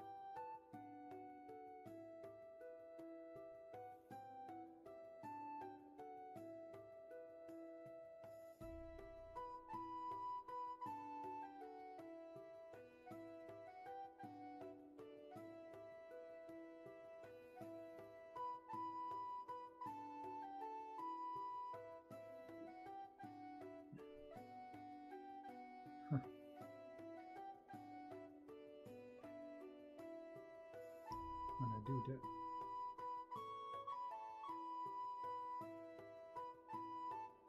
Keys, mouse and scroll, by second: 15.3 ctrl+z, 20.8 ctrl+z, 21.2 space, 22.0 space, 24.1 shift+space, 24.7 space, 26.9 shift+space, 27.6 space, 28.8 space, 31.2 ctrl+z, 32.8 shift+space, 33.5 space, 34.2 shift+space, 35.7 ctrl+z, 36.4 shift+space.